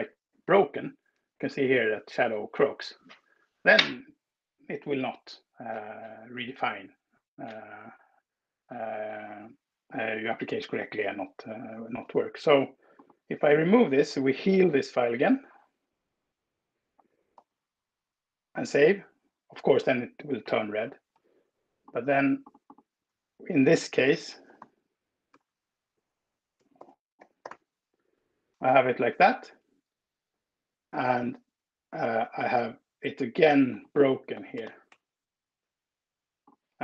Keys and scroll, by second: 15.0 super+l, 16.2 BackSpace, 16.6 Return, 17.2 super+s, 24.2-25.1 typing, 26.6-27.8 typing, 28.8 Escape, 34.1-35.1 typing.